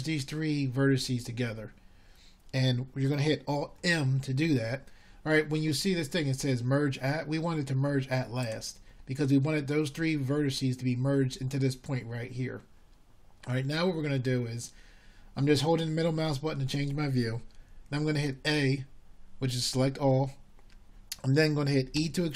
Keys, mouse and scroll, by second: 8.2 alt+m, 18.1-18.5 middle drag.